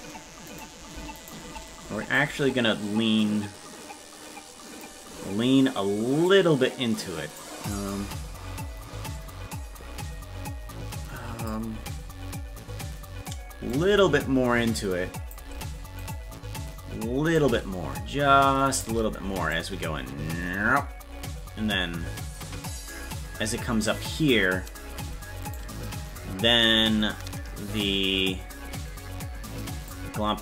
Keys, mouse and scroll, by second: 0.6 right click, 1.2 shift+right click, 2.2-4.8 drag, 6.3-7.4 right drag, 6.3 click, 7.7-11.5 drag, 13.7-15.3 drag, 16.1-17.3 right drag, 17.3-18.8 drag, 19.5-24.3 drag, 25.5-27.8 right drag, 27.8-29.9 drag.